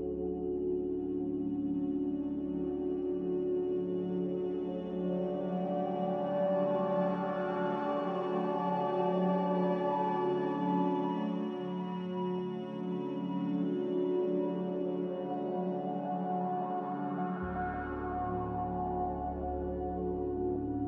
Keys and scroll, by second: 11.6 n, 19.9 z.